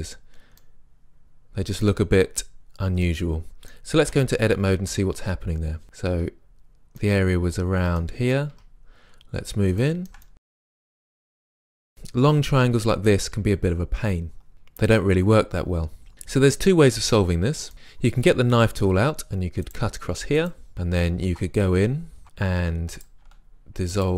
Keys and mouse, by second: 2.5-3.1 middle drag, 4.1 Tab, 6.1 Tab, 8.5 Tab, 18.9 k, 21.3 ctrl+Tab, 23.0-24.1 right drag.